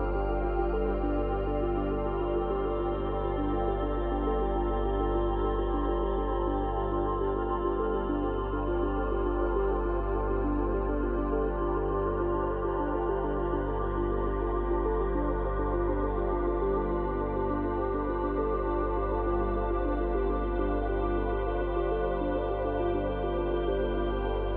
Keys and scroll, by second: 2.8 space, 5.5 space, 8.8 space, 17.2 space, 18.7 space.